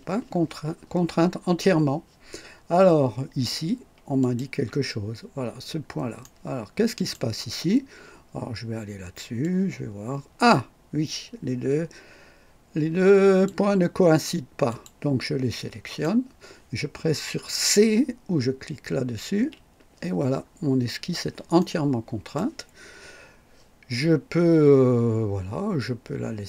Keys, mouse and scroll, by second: 4.2 click, 5.7-6.0 scroll up 1, 6.2-7.3 right drag, 9.4-13.6 drag, 14.7 click, 15.5-16.2 drag, 19.3 c, 20.3-21.1 scroll down 1, 21.6 right click.